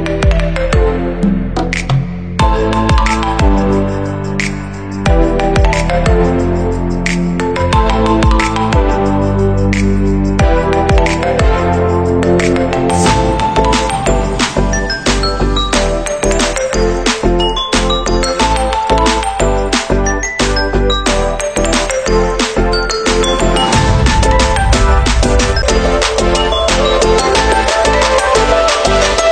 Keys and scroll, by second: 25.3 ctrl+c.